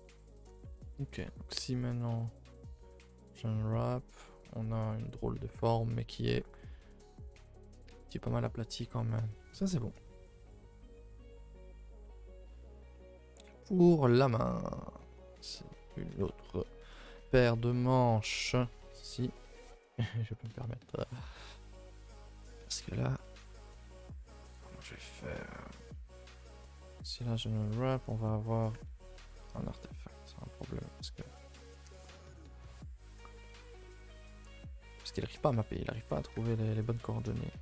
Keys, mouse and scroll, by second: 0.1 middle click, 0.6 3, 1.3 l, 3.0 u, 3.5 a, 3.6 a, 8.4 middle click, 8.7 a, 8.8 a, 9.0 middle click, 9.6 scroll up 1, 9.7 middle click, 10.2 scroll up 2, 10.4 a, 10.6 a, 11.3 l, 12.0 ctrl+i, 12.2 h, 12.9 middle click, 13.3-13.6 scroll up 4, 13.6 middle click, 14.4 a, 14.6 a, 14.8-16.1 middle drag, 16.1 2, 16.3-19.5 middle drag, 19.5 a, 19.6 a, 20.7-22.7 middle drag, 22.7 scroll up 2, 23.0 middle click, 23.2 a, 23.4 a, 23.5 middle click, 23.7-24.3 scroll down 2, 23.8 ctrl+s, 24.3-26.3 shift+middle drag, 26.3 a, 27.7 u, 28.9 ctrl+z, 29.4 a, 29.6 a, 29.7-32.4 middle drag, 32.4 a, 32.5 a, 33.1 3, 33.4-36.0 middle drag, 36.0 a, 36.1 a, 37.0 middle click, 37.5 a.